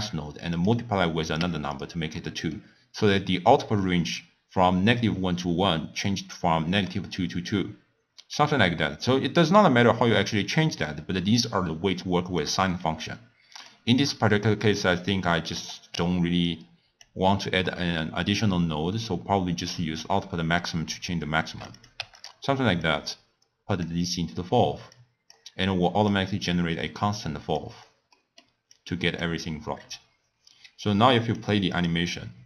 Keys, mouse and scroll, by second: 0.6 click, 1.3 click, 2.1-5.2 middle drag, 9.6-12.5 drag, 12.9 x, 13.2 click, 14.0-14.8 middle drag, 14.8 click, 16.4 click, 19.9-22.2 drag, 22.8 drag, 24.9 click, 25.6 click, 26.4 click, 27.6 click, 28.1 middle click, 28.7 click, 29.7 scroll up 1, 29.8-30.7 scroll down 1, 31.2 drag, 31.7 click.